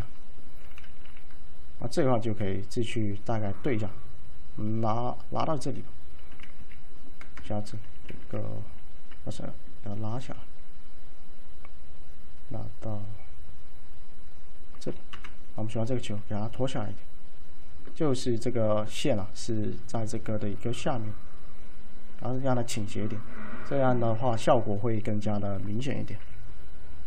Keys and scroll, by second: 1.1 w, 6.6 1, 15.2 F5, 26.3-27.0 typing.